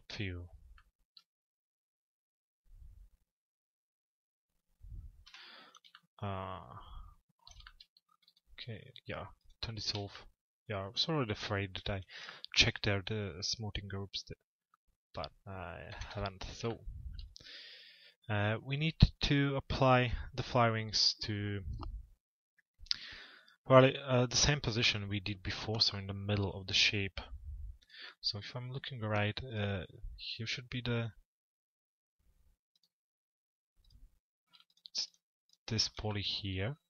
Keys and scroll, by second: 4.8 p, 15.5 t.